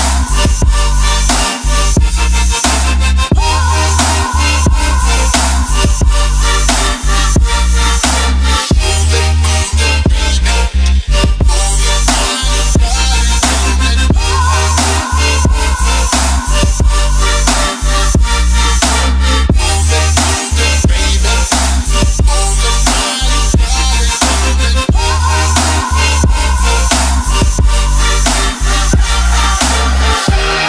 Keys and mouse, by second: 0.4 middle click, 1.3 middle click, 2.1 middle click, 4.0 middle click, 6.6-8.2 right drag, 8.7 right click, 9.4 right click, 10.7-12.0 right drag, 13.4-15.7 drag, 15.9 middle drag, 17.3 ctrl+middle drag, 17.8 ctrl+middle drag, 18.1 middle click, 27.2-27.6 ctrl+middle drag, 28.3 shift+drag, 28.5 shift+click, 28.8 ctrl+middle drag, 29.3 shift+click.